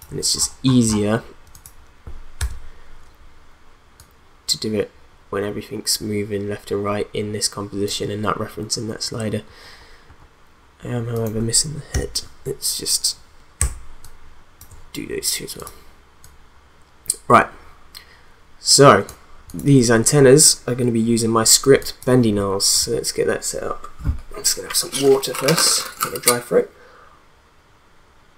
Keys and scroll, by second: 11.9 u, 21.7 space.